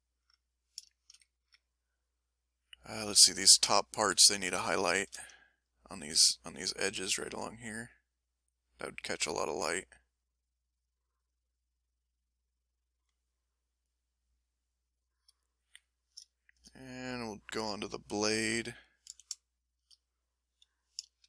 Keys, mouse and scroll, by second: 0.4 ctrl+middle click, 0.8 ctrl+shift+click, 0.9 ctrl+shift+middle click, 1.3-3.2 ctrl+shift+middle drag, 4.1 ctrl+s, 4.6-6.2 shift+middle drag, 7.1 ctrl+f, 7.8 click, 8.2 click, 11.2 click, 11.7-13.1 drag, 13.7-15.2 drag, 15.5 ctrl+click, 16.3 ctrl+shift+click, 17.6 ctrl+shift+m, 19.0 a, 19.4 shift+click, 21.1-21.2 shift+drag.